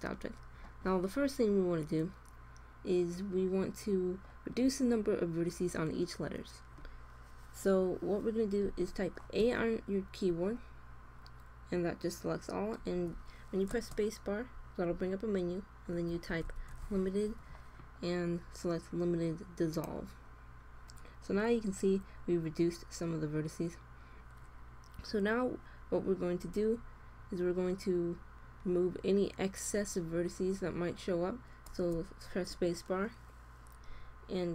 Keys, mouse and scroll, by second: 9.3 a, 16.4 i, 28.3-29.6 middle drag, 31.6 space.